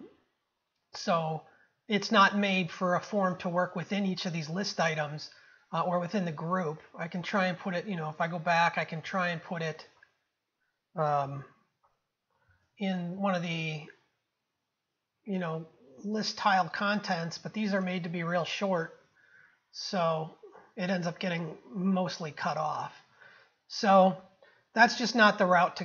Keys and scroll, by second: 8.5 ctrl+z, 11.3 ctrl+c, 12.5 ctrl+x, 17.9 ctrl+v, 24.9 ctrl+z.